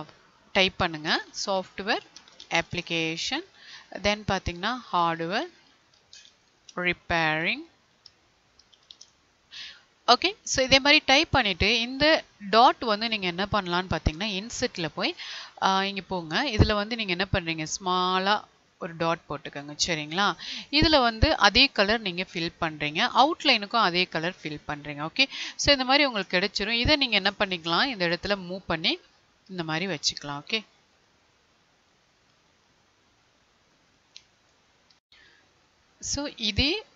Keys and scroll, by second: 1.0 space, 3.0 Tab, 6.6 space, 27.4 Left, 29.5 Right, 34.9 Down.